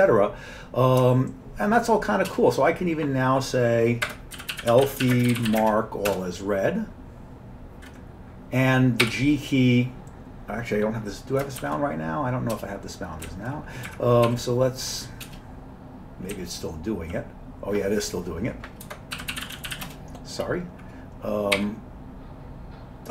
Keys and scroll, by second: 2.3 Return, 4.1 Escape, 4.1-6.0 typing, 6.1 Return, 9.0 g, 11.6 shift+g, 12.6 g, 13.3 Down, 13.9 Up, 14.3 q, 15.3 Return, 16.3-17.1 Down, 18.9 Escape, 18.9-20.3 typing, 21.4-22.1 typing.